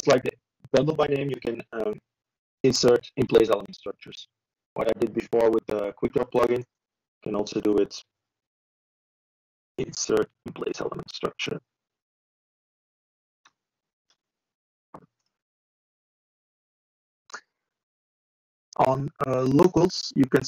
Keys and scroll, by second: 0.5 typing, 3.3-4.1 typing, 10.3 ctrl+e, 11.5 ctrl+e, 18.3 Delete, 18.8 ctrl+v.